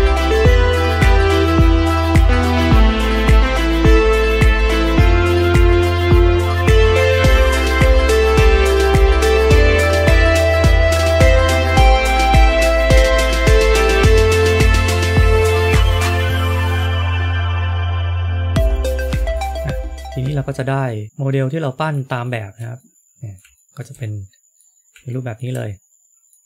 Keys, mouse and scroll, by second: 0.6 g, 4.2 click, 4.9 click, 6.2 click, 6.8 shift+click, 7.3 click, 7.3 f, 7.7 middle click, 13.7 scroll down 2, 14.0 middle click, 14.8 middle click, 15.5 middle click, 16.6 shift+middle click, 17.5 click, 17.7 click, 17.8 scroll down 2, 17.9 shift+middle click, 18.1 middle click, 18.4 shift+middle click, 18.5-18.9 scroll up 2, 19.0 shift+middle click, 19.4 middle click, 22.1 shift+middle click, 22.7 middle click, 23.5 shift+middle click, 23.9 middle click, 25.0 shift+middle click.